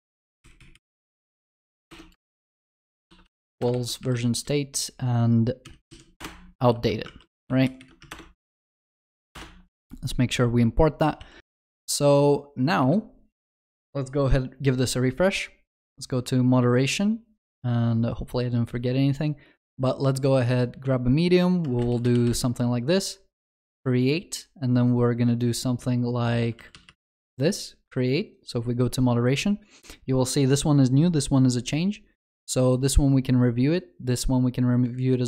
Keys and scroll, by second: 0.1 ctrl+c, 1.9 ctrl+BackSpace, 3.7 ctrl+v, 6.2 Return, 6.7 ctrl+alt+shift+l, 7.1 ctrl+s, 10.8 alt+Return, 11.2 ctrl+s.